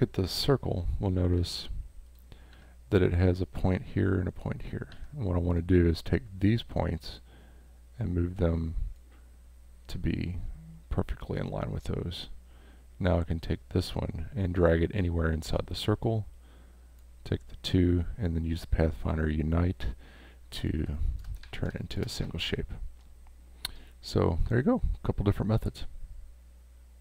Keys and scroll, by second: 1.4 v, 2.5 a, 4.9 a, 15.8 v, 20.9 space, 21.7 space.